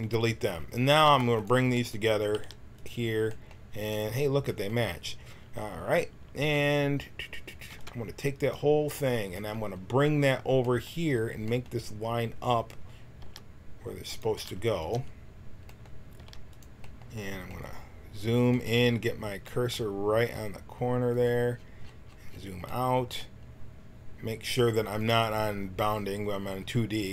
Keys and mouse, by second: 1.0 b, 2.3 g, 6.4 a, 7.7 b, 13.2 g, 14.3 g, 16.1 g, 21.1-27.1 drag.